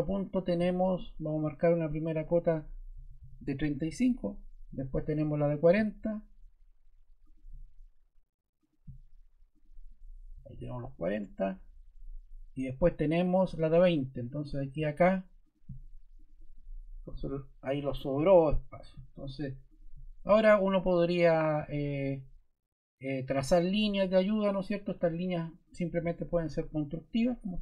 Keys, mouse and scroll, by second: 2.6-4.5 typing, 10.1-11.0 typing, 12.3 typing, 14.4 click, 15.4 click, 16.1 click, 16.8-17.7 typing, 18.9 typing.